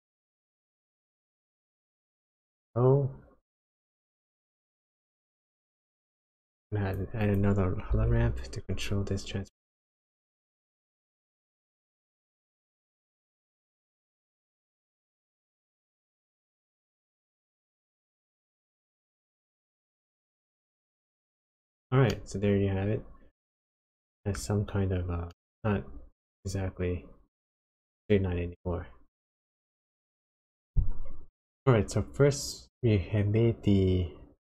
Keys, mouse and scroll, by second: 5.8 click, 7.2 click, 7.9 shift+a, 14.1 click, 15.3 click, 16.5 click, 18.2 click, 22.1 middle click, 25.2 middle click.